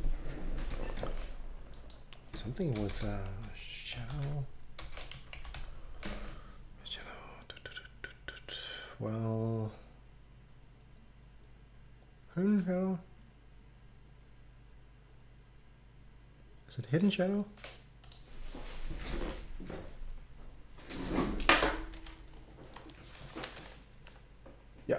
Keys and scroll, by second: 2.8-6.1 typing.